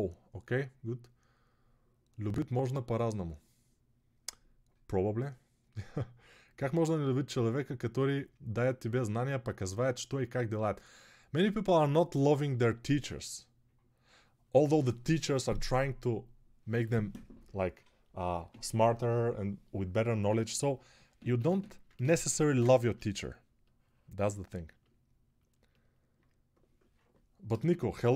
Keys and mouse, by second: 21.1 super+space, 22.3 space.